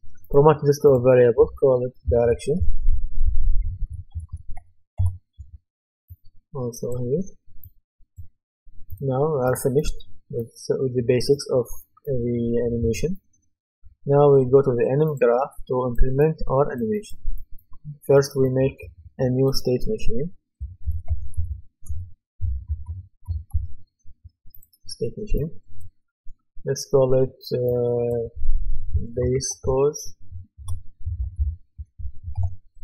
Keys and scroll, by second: 2.2-4.6 typing, 5.0 Return, 20.4-22.0 typing, 23.3 typing, 28.9-32.4 typing.